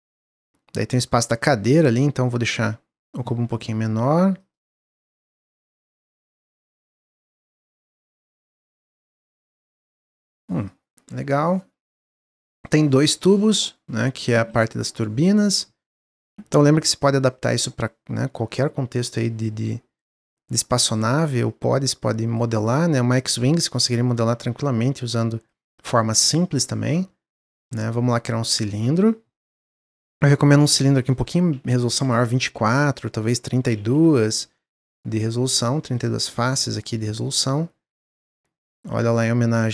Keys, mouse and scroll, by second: 0.8 click, 2.5 click, 4.3-6.7 drag, 10.9-14.1 middle drag, 14.1 click, 14.6-16.4 middle drag, 16.4 click, 18.9 shift+click, 20.2-21.6 drag, 22.5 drag, 23.1 drag, 23.6 shift+drag, 24.3 click, 25.7 click, 27.5-29.5 drag, 29.5-30.3 middle drag, 30.3-36.8 drag, 39.6-39.7 drag.